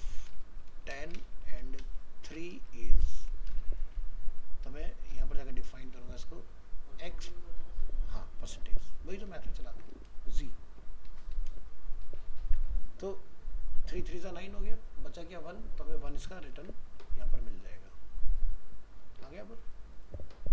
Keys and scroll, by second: 12.4 ctrl+s, 16.5 ctrl+s.